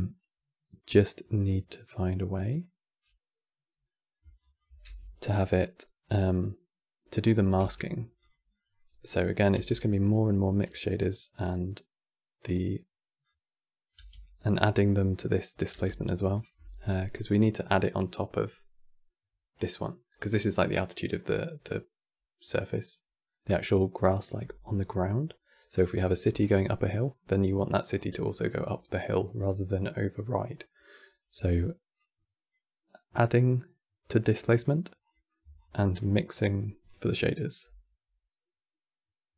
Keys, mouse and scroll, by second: 2.7-4.1 middle drag, 4.1-6.6 shift+right drag, 6.6 g, 8.2-8.7 middle drag, 8.7 click, 9.2 g, 10.7 click, 12.9 click, 13.6 g, 15.1 click, 15.6 g, 19.2 click, 26.1-29.1 middle drag, 31.7 click, 32.8-33.9 middle drag, 33.9 click, 34.2 click, 34.7 click, 35.3-38.4 alt+drag.